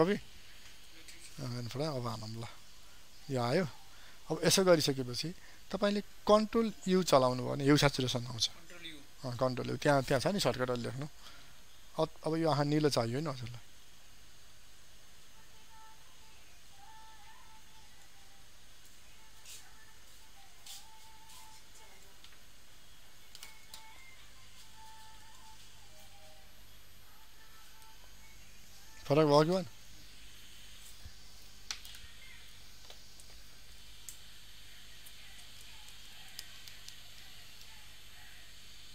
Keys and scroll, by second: 6.6 ctrl+u, 26.7 ctrl+d, 27.8 ctrl+0.